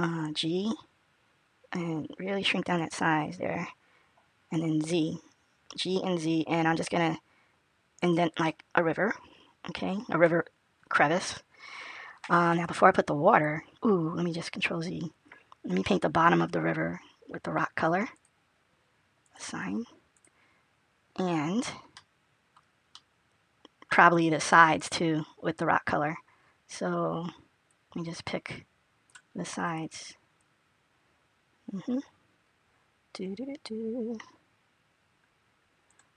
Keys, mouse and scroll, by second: 0.1 g, 8.3 middle click, 12.5 click, 14.4 ctrl+z, 18.0 click, 19.5 click, 20.3 click, 21.8 middle click, 22.9 middle click, 25.1-27.5 scroll up 2, 27.5 click, 29.2-29.8 scroll up 2, 30.2 click.